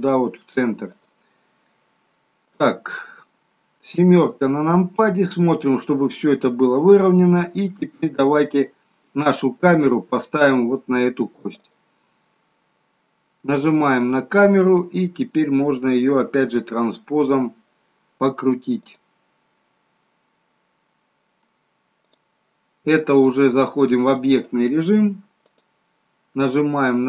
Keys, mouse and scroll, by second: 2.5 click, 3.9 KP_7, 5.3 scroll down 2, 8.2 shift+middle click, 11.6 click, 13.4 click, 16.4 click, 18.9 click.